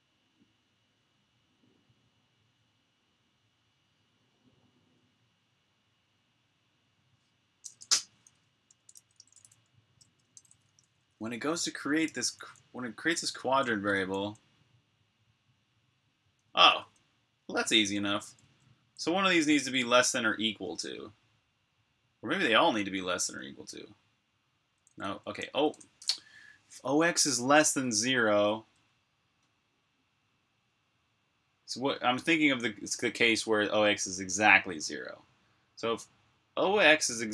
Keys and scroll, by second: 8.6 Escape, 8.7-14.3 typing, 16.3-19.5 typing, 21.6 typing, 24.7-28.4 typing.